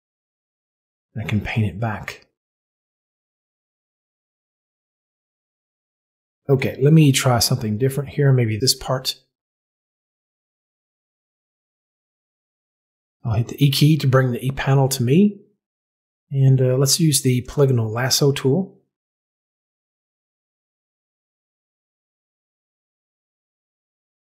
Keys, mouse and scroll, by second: 8.5 click, 9.6 z, 13.4 e, 17.3 click, 19.7 click, 20.3 click.